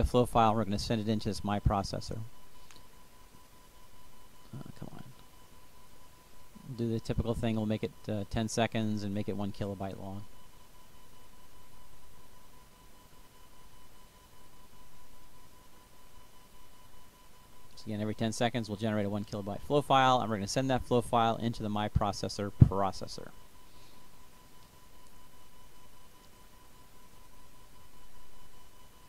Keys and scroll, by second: 9.9-11.2 typing, 17.5 1.